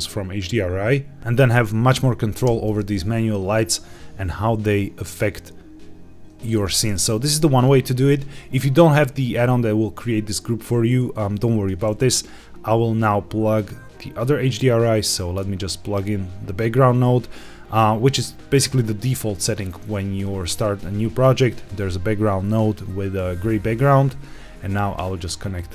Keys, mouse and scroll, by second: 1.2 Escape, 2.4 g, 2.7 shift+z, 6.4 click, 6.7-7.2 scroll up 2, 7.4 shift+middle click, 8.3-8.8 scroll down 3, 8.7-9.4 middle drag, 15.1-16.7 drag, 18.1 click, 24.9-25.7 drag.